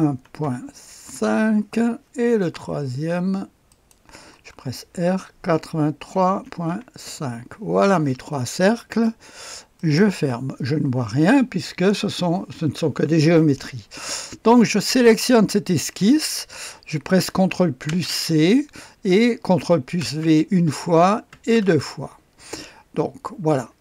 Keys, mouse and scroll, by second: 0.0-0.4 typing, 1.0 Return, 3.7 click, 4.1-6.6 typing, 7.0 Return, 9.7 click, 14.8 click, 17.8 ctrl+c, 20.0 ctrl+v, 21.3 ctrl+v.